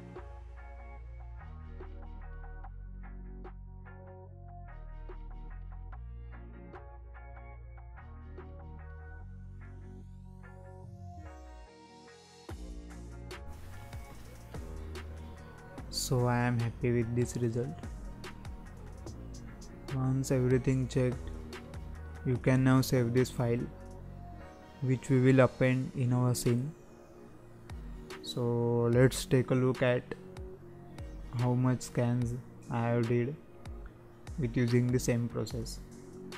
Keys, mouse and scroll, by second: 0.0 ctrl+space, 0.1 scroll up 2, 0.2 scroll down 2, 0.2 shift+middle click, 0.3-0.7 scroll up 2, 0.4 middle click, 0.7 middle click, 0.8 scroll down 1, 0.9 z, 1.7 scroll up 2, 2.1-2.6 scroll down 2, 2.8 z, 3.1 scroll down 3, 3.4-3.7 scroll up 3, 4.3-5.0 scroll up 2, 5.0 z, 5.4-5.9 scroll up 4, 5.9-6.6 scroll down 4, 7.1 z, 8.3 z, 9.2 z, 9.6 click, 10.6-11.3 right drag, 11.3 alt+a, 11.4 scroll down 1, 11.7-12.8 scroll up 1, 12.8 z, 15.1 z, 15.5-15.8 scroll down 4, 15.8 scroll up 5, 16.2-17.1 middle drag, 17.1 z, 18.1-18.5 scroll down 2, 18.5-21.5 middle drag, 22.4-22.9 scroll down 1, 22.9 shift+middle click, 23.2-23.5 scroll up 2, 23.5-25.4 middle drag, 25.4-25.8 scroll down 2, 25.8-26.8 scroll up 5, 26.8-27.2 scroll down 1, 27.2-27.5 shift+middle drag, 27.5 scroll up 1, 27.7-28.3 middle drag, 28.3-28.7 scroll down 1, 28.7-35.9 middle drag, 35.9 click.